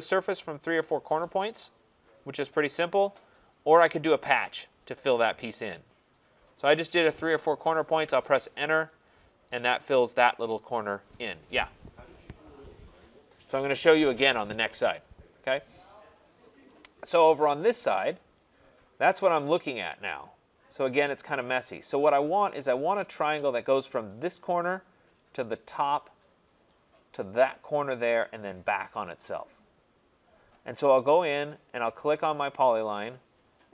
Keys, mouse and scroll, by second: 1.9 click, 3.3 click, 4.4 click, 8.0 Return, 9.1-9.4 scroll, 11.1 right click, 15.1-16.2 scroll, 16.7 right click, 17.0-18.4 scroll, 22.0 right click, 26.7 right click, 32.1 click.